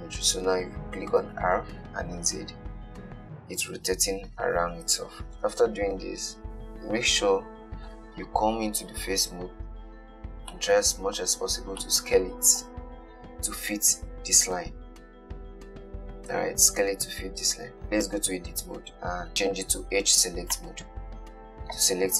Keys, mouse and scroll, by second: 1.4 r, 9.0 KP_1, 10.0-10.7 scroll up 5, 10.7-11.6 shift+middle drag, 11.6-12.1 scroll up 2, 12.1-15.1 shift+middle drag, 18.2 Tab, 19.3 2, 20.8 click.